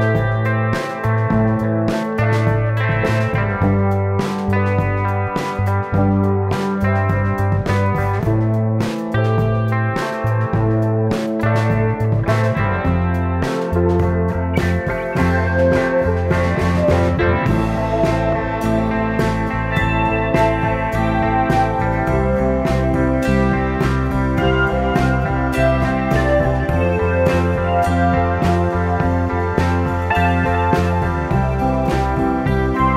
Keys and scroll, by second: 2.7 m, 4.7 space, 17.6 space, 27.3 space, 30.4 space.